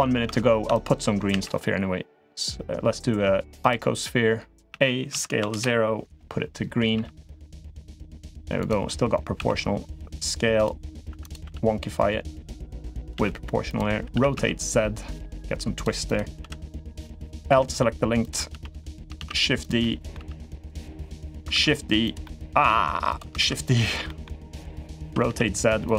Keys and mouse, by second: 0.0 Tab, 1.1 shift+a, 4.5 a, 4.9 s, 6.7 g, 9.1 s, 10.8 1, 11.0 click, 11.2 g, 12.8 click, 12.9 g, 13.9 r, 15.8 click, 16.2 l, 16.9 click, 17.2 l, 18.0 click, 18.3 l, 18.5 middle click, 18.9 shift+d, 19.6 middle click, 19.9 g, 20.7-21.2 middle drag, 21.3 shift+d, 22.0-22.4 middle drag, 22.4 g, 23.2 shift+d, 23.8 middle click, 24.4 click, 24.8 r, 25.8 g.